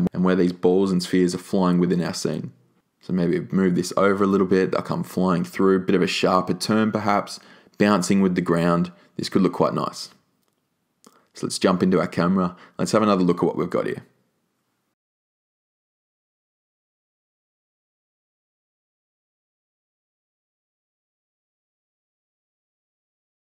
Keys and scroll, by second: 0.0 r, 6.3 e.